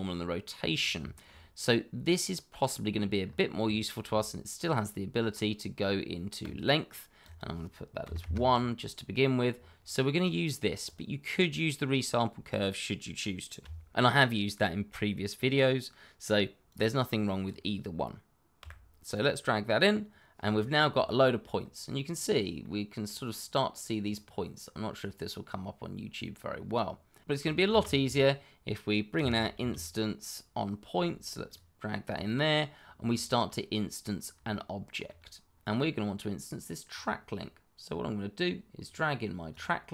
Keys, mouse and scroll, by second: 0.7 scroll down 1, 1.0 shift+middle click, 3.1-3.6 scroll up 1, 3.7 shift+middle click, 3.8 middle click, 3.9 shift+middle click, 4.1-4.6 scroll up 1, 4.6 click, 8.0 1, 8.2 Return, 9.5-10.1 scroll down 1, 10.8 click, 16.6 click, 18.6 Delete, 19.1 click, 21.5-22.0 scroll up 1, 22.0-22.6 scroll down 1, 22.6 middle click, 24.0 click, 24.6-25.1 scroll up 1, 25.1-26.5 scroll down 1, 27.2 Escape, 27.6 shift+a, 29.1 i, 29.3 n, 29.5 s, 31.4 click, 32.7-33.0 scroll down 1, 33.1 shift+middle click, 34.5 shift+middle click, 36.8 click.